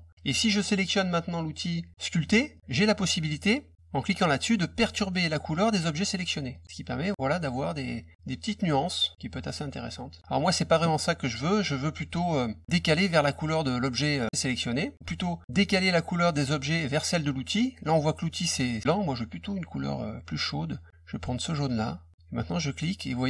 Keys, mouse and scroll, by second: 2.5 click, 6.5 click, 6.6-10.1 drag, 14.3 click, 21.6 click, 22.4-23.2 drag.